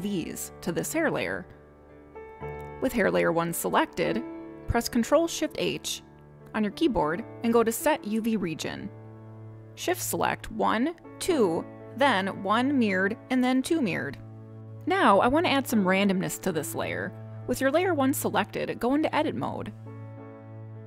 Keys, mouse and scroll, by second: 5.3 ctrl+shift+h, 11.2 click, 12.2 shift+click, 13.0 click, 14.0 shift+click, 18.4 click, 20.3 click.